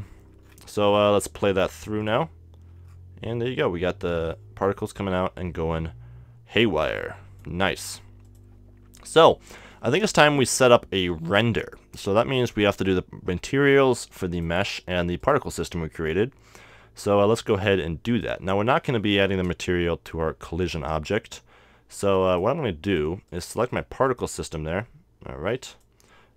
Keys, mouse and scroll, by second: 1.0-2.0 middle drag, 2.0-3.7 drag, 4.8 middle click, 7.1-10.1 drag, 14.4-17.4 right drag, 18.1-19.9 right drag, 22.3-26.3 right drag, 25.7-26.3 drag.